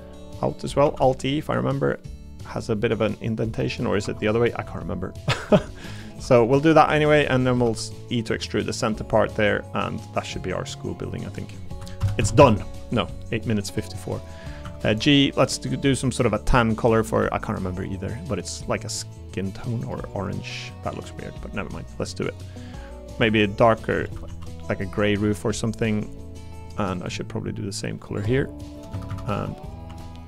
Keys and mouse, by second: 0.3 middle click, 0.8 alt+e, 3.6 click, 4.2 click, 6.4 middle click, 7.3 middle click, 7.6 e, 10.8 click, 11.2 middle click, 12.0 ctrl+KP_Add, 14.6 a, 14.9 g, 18.3 click, 20.0 click, 20.4 middle click, 21.0 middle click, 21.9 middle click, 22.4 click, 22.9 middle click, 23.3 shift+click, 24.0 a, 24.3 g, 25.7 click, 26.2 middle click, 26.8 click, 27.7 shift+click, 28.6 shift+click, 28.9 a, 29.1 a, 29.3 b, 29.9 g.